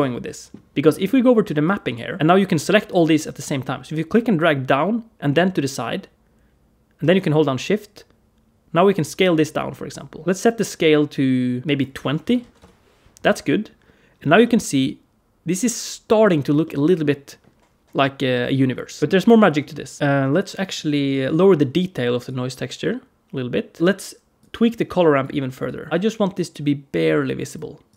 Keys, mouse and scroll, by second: 0.1 middle click, 0.7 middle click, 1.5 click, 2.2 click, 4.0 click, 11.6 click, 14.2 middle click, 16.5 middle click, 19.0 click, 19.0 middle click, 19.8 click, 19.9 middle click, 19.9-20.3 scroll up 2, 20.5 click, 22.1 click, 23.8 click, 23.8 middle click, 24.2 click, 25.5 click, 25.9 click, 26.2 click, 27.7 click.